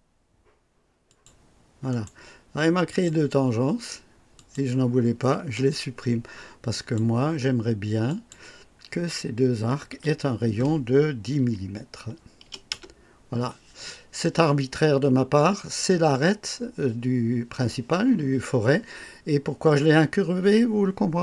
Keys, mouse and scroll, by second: 1.0 click, 1.9 right click, 2.9 click, 4.3 click, 5.3 Delete, 6.7 click, 8.0 click, 9.9 r, 11.4 KP_1, 12.4 KP_0, 12.9 Return.